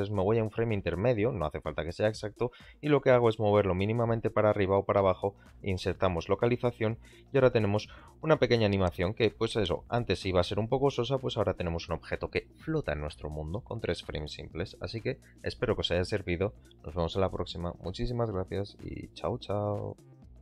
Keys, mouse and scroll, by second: 2.3 g, 2.4 z, 3.7 shift+click, 4.9 i, 7.4 click, 7.8 space.